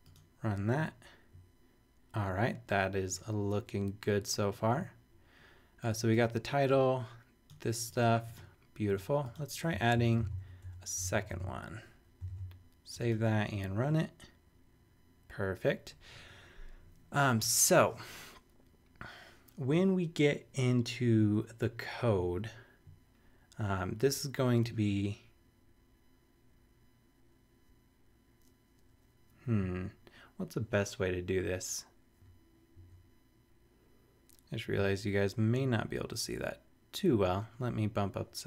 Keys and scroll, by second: 9.9 shift+super+Up, 10.2 shift+super+c, 10.4 super+Right, 10.6 Return, 11.3 super+v, 12.3 super+s, 32.1 super+=.